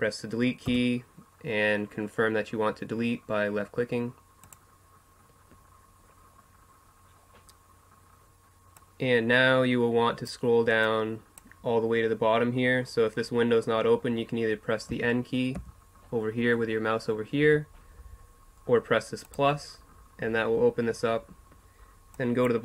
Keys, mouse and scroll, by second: 0.7 Delete, 8.7-10.6 drag, 10.8-12.7 drag, 14.9 n, 15.5 n, 17.4 n, 19.2-21.1 drag, 22.1-22.6 drag.